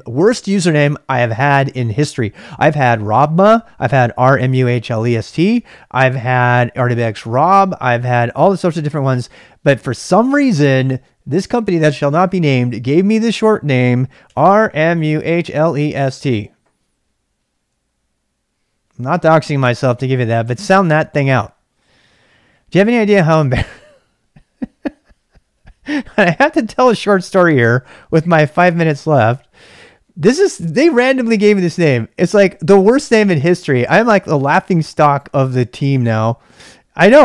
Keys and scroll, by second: 14.1-16.4 typing.